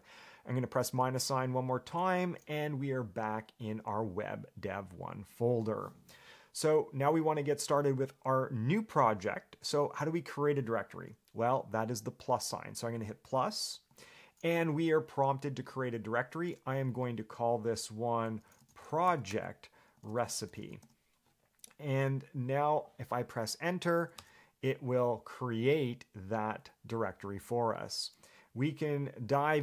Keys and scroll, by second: 2.1 -, 18.4-21.5 typing, 24.4 Return.